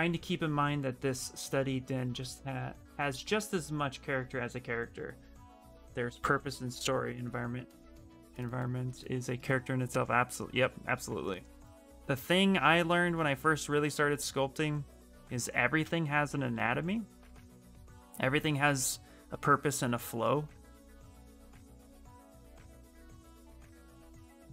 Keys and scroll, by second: 15.6 ctrl+z.